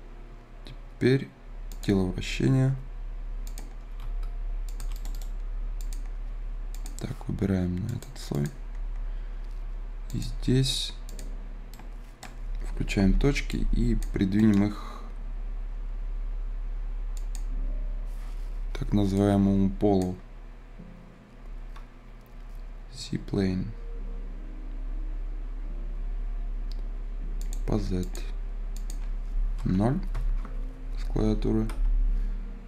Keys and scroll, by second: 12.9 F10, 31.6 Return.